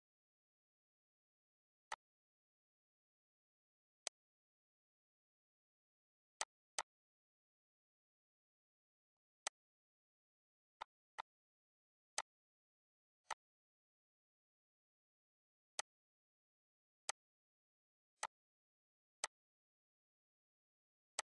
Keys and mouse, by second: 0.3 click, 0.8 click, 2.5 click, 4.5 click, 7.3 click, 9.0 click, 10.3 click, 11.6 click, 13.9 click, 15.1 click, 16.2 click, 17.2 click, 19.3 click, 20.3 click.